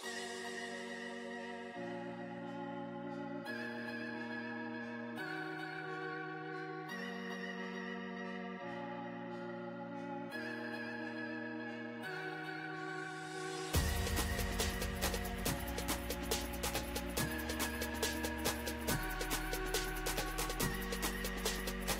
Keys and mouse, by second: 0.5 right click, 5.0-8.8 right drag, 8.8-14.2 middle drag, 14.2 ctrl+i, 16.8 click.